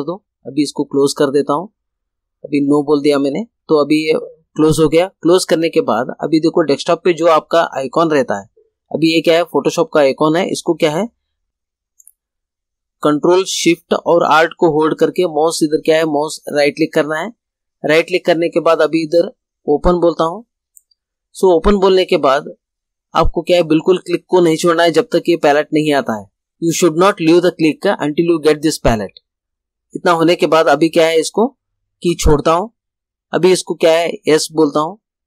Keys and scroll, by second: 3.6 space, 21.5 ctrl+alt+shift+space.